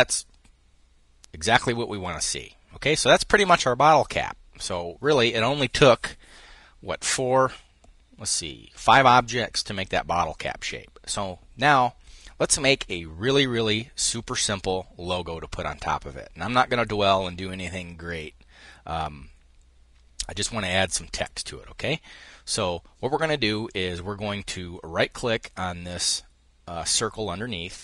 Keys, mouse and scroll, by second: 1.6 click, 3.2-3.6 scroll up 1, 4.5-6.9 scroll up 1, 23.3 click, 27.4 click.